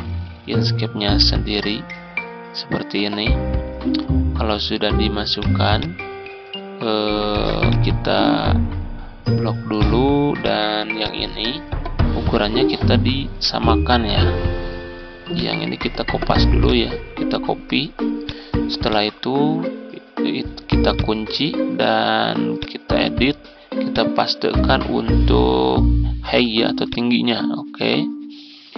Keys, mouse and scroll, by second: 3.9 ctrl+scroll down 1, 5.2-7.1 shift+drag, 7.2 z, 7.5-12.0 drag.